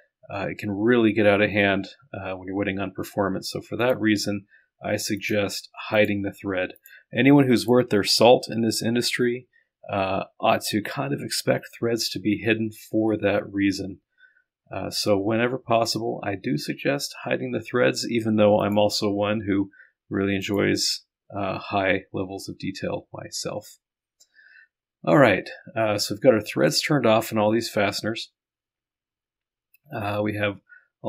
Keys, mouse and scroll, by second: 3.8 click, 5.2 click, 6.0 click, 6.8 click, 7.6 click, 18.6 click, 20.5 click, 20.6 middle click, 21.5-22.1 scroll down 1, 22.1 scroll down 1, 22.7-23.4 scroll down 1, 23.5-24.1 scroll up 1, 24.1-24.6 scroll up 1, 25.2-26.0 scroll up 2, 26.0-26.7 scroll up 1, 26.8-28.2 drag, 28.2-29.4 scroll up 2, 29.4 scroll up 1.